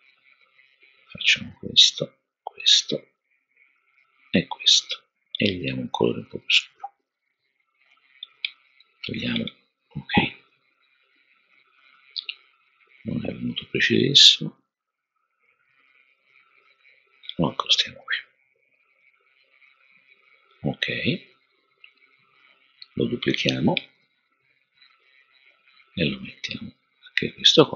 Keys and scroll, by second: 23.8 super+d, 26.8 super+d.